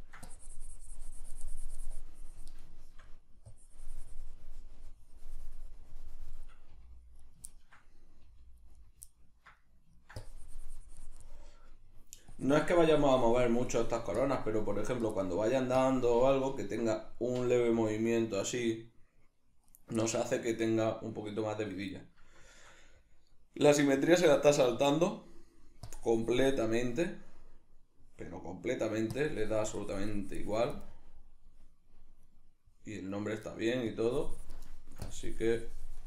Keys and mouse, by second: 0.2-2.7 drag, 2.7 shift+middle click, 3.5-7.3 drag, 6.7 g, 7.3 right click, 7.5-8.9 ctrl+middle drag, 8.2 g, 8.9 right click, 9.1-10.2 ctrl+middle drag, 10.2-11.4 drag, 11.4 middle click, 12.3-15.2 drag, 15.2 middle click, 15.8 click, 16.5-19.8 ctrl+middle drag, 17.5 r, 19.8 right click, 20.0-21.1 middle drag, 21.1 right click, 22.0-25.9 middle drag, 25.9-27.3 drag, 27.3 right click, 28.7 right click, 29.1-30.9 drag, 30.9-32.3 middle drag, 32.3 right click, 33.1 right click, 33.5 middle click, 33.9 click, 34.6 shift+middle click, 35.0-36.0 drag.